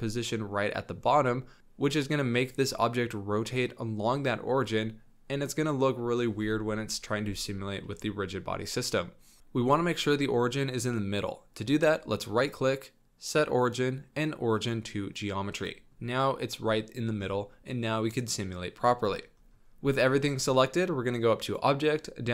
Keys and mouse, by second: 7.9 middle click, 8.2-9.4 drag, 15.6 click, 15.6 middle drag, 15.8 click, 17.5 click, 17.5-17.9 middle drag, 17.7 click, 17.9 click, 18.0 middle drag, 18.2-18.7 drag, 18.7-19.0 middle drag, 21.4-22.3 drag.